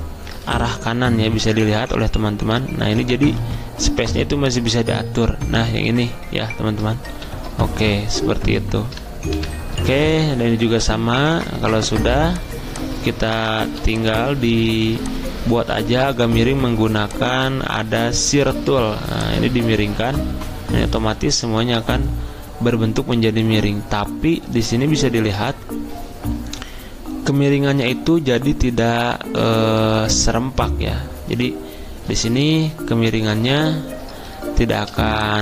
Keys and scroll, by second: 0.4 alt+Right, 7.1 alt+Right, 9.4 alt+Left.